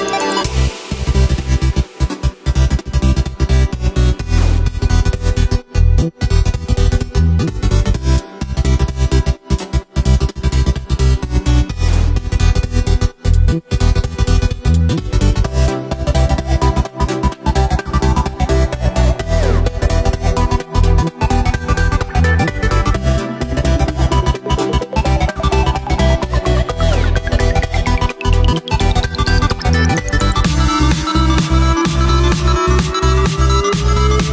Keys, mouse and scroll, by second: 1.4-1.9 scroll up 1, 1.9-2.7 scroll down 3, 2.7-3.4 scroll up 2, 3.4 right click, 4.0 scroll down 1, 4.3 s, 5.9 g, 8.1 scroll down 1, 8.4 right click, 9.5 KP_7, 11.2 s, 12.1 s, 14.3 g, 16.0 KP_1, 17.2 g, 20.1 KP_3, 22.1 alt+d, 22.4 g, 25.2 ctrl+m, 27.1 g, 28.9 right click, 29.5 g, 31.1-33.2 middle drag, 33.2 shift+right click, 33.4-34.2 middle drag, 34.2 KP_1.